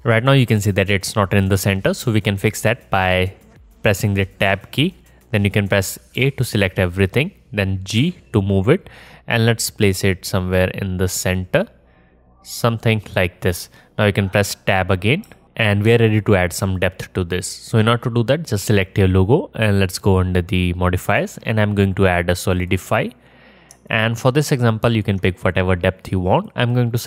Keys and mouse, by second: 4.5 Tab, 6.2 a, 8.0 g, 15.3 Tab, 16.4-19.9 alt+middle drag, 19.9 click, 20.0-21.1 middle drag, 21.1-27.0 drag.